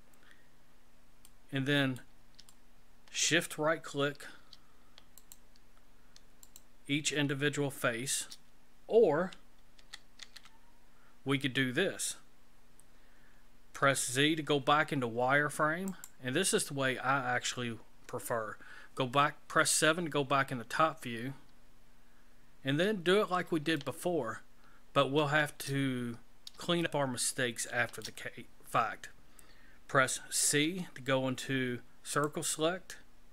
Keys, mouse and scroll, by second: 1.2 middle click, 2.5 shift+middle click, 5.2 shift+right click, 6.4 shift+right click, 9.7 ctrl+z, 10.2 ctrl+z, 13.7 z, 18.0 KP_7, 22.8-23.4 scroll up 4, 23.7 shift+middle click, 26.1-26.5 scroll up 4, 26.8 shift+middle click, 30.6 c.